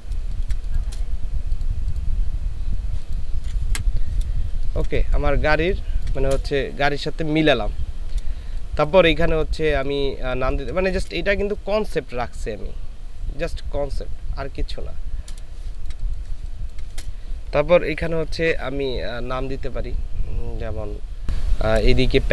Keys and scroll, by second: 0.3 ctrl+space, 3.8 Delete, 4.5 ctrl+space, 8.5 space, 10.1 ctrl+space, 15.8 ctrl+space, 16.3 ctrl+space.